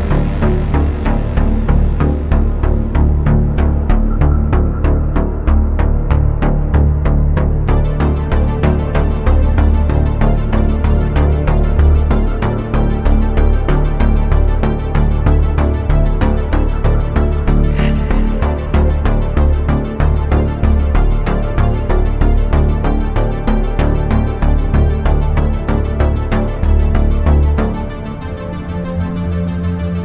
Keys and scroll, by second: 0.0 ctrl+z, 0.4 ctrl+z, 0.7 ctrl+z, 1.2 ctrl+z, 1.5 ctrl+z, 1.9 ctrl+z, 3.1 ctrl+z, 5.3 ctrl+z, 6.4 space, 6.9 space, 7.3 ctrl+z, 7.9 ctrl+z, 8.6 ctrl+z, 9.0 space, 9.4 ctrl+z, 12.5 ctrl+shift+z, 13.8 ctrl+z, 14.1 ctrl+z, 18.0 space, 19.1 ctrl+z, 20.6 space, 21.0 ctrl+z, 22.2 ctrl+z, 22.7 space, 24.5 ctrl+z, 25.2 ctrl+z, 28.2 ctrl+z, 28.5 ctrl+z.